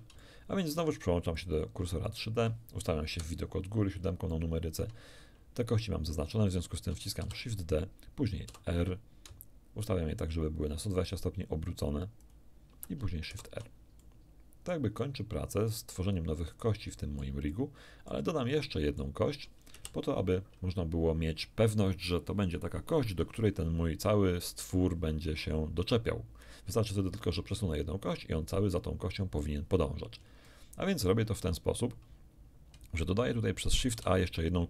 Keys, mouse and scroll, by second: 0.2 shift+middle click, 1.3 shift+click, 2.1 shift+click, 3.1 KP_7, 4.3 shift+click, 7.2 shift+d, 8.5 r, 12.2 ctrl+click, 13.3 ctrl+shift+r, 14.0 ctrl+shift+click, 15.0 click, 16.4-17.4 drag, 18.7 shift+click, 19.7 shift+KP_1, 30.3 shift+scroll down 1, 30.5 shift+middle click, 30.8 shift+click, 30.9 shift+middle click, 33.9 shift+z.